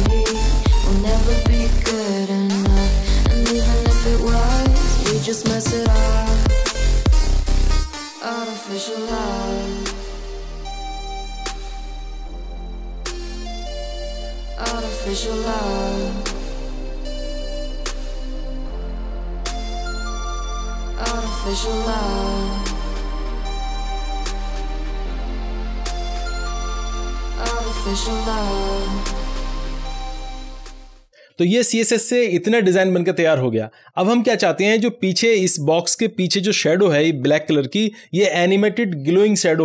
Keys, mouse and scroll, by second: 0.0-0.1 typing, 0.2 ctrl+s, 1.2 click, 1.9 Return, 2.0-12.3 typing, 5.1 click, 5.2 scroll down 1, 5.6 click, 7.1 ctrl+s, 7.5 Return, 10.4 Down, 10.6 Return, 12.3 click, 12.5 ctrl+s, 13.6 click, 14.0 Right, 14.2 Left, 14.3 BackSpace, 14.6 ctrl+s, 15.5-15.9 scroll up 1, 17.2 scroll down 1, 17.7 click, 18.0-18.4 scroll up 1, 18.4 click, 18.9 right click, 19.4 click, 19.5 scroll down 1, 20.0 click, 20.2 Return, 20.6 ctrl+v, 20.8-21.3 scroll down 1, 23.3 click, 23.8-25.3 typing, 25.5 ctrl+s, 26.8 click, 27.6-30.1 typing, 29.1 Return.